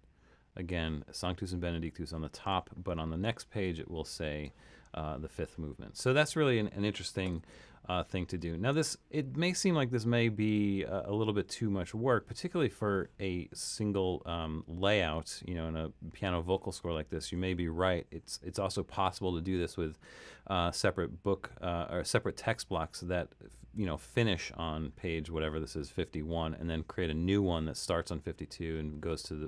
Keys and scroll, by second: 8.1 super+-.